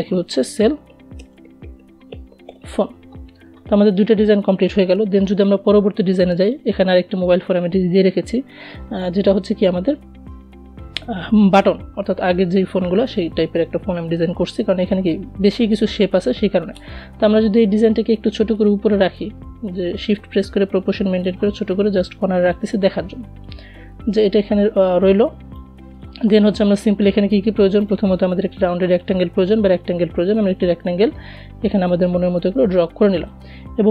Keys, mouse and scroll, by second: 0.0-1.1 typing, 4.7 click, 11.5-16.9 drag, 16.9-24.3 shift+drag, 26.1 right click, 27.2-33.9 drag.